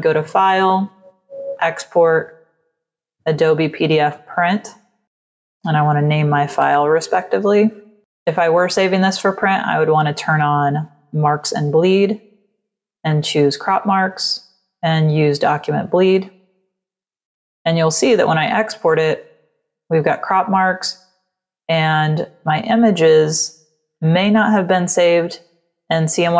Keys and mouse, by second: 1.4 click, 2.6 click, 4.0 click, 4.7 click, 4.8-5.7 typing, 6.5 Return, 9.4 click, 13.0 click, 14.8 click, 16.5 click.